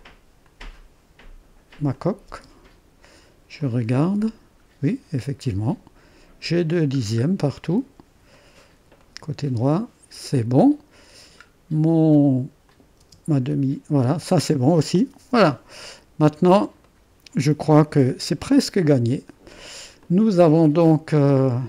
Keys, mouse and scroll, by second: 1.9-2.9 drag, 2.4 space, 3.5 click, 4.2 click, 4.3 click, 4.3 scroll up 1, 4.9-7.0 drag, 7.0 middle click, 7.2 middle click, 7.6-8.8 drag, 11.2-12.0 scroll down 1, 12.0-12.6 scroll down 1, 12.6 click, 13.0 space, 14.0 space, 15.7-16.8 drag, 18.0 space, 18.6-21.6 drag.